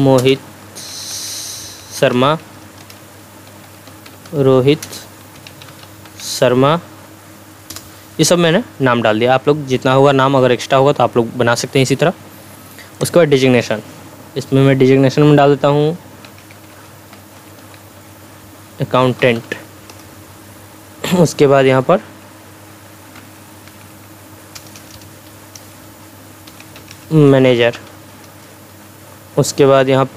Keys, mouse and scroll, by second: 0.0-6.7 typing, 2.8 Return, 7.7 Return, 13.0 click, 16.1-19.7 typing, 19.9 Return, 22.8-23.7 typing, 26.3-28.2 typing, 28.3 Return.